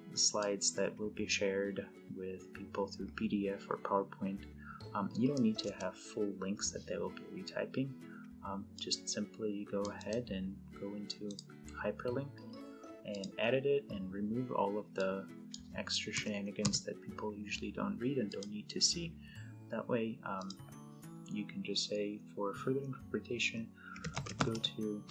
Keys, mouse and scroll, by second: 5.2 BackSpace, 5.4 space, 8.5-10.1 click, 9.7 right click, 12.9 click, 15.9 BackSpace, 18.1 click, 19.6 click, 23.4-24.6 typing.